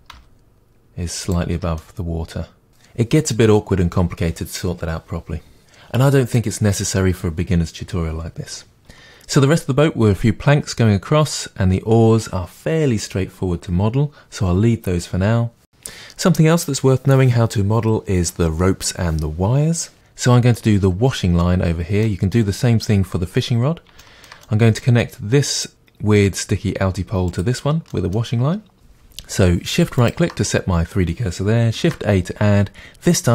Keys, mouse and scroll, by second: 1.5 Tab, 1.8-19.7 middle drag, 15.6-17.3 scroll down 2, 17.3-19.7 scroll down 1, 20.7 middle click, 22.4-25.5 middle drag, 22.4 scroll up 1, 25.5 click, 27.3 click, 27.9-28.7 middle drag, 28.7 shift+right click, 30.0 shift+right click, 31.8 shift+a.